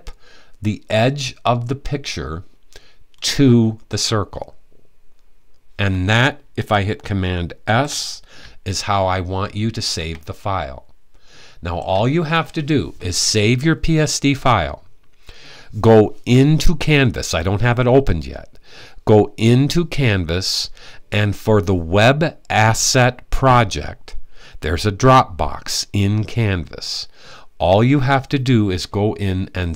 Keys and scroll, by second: 7.2 s.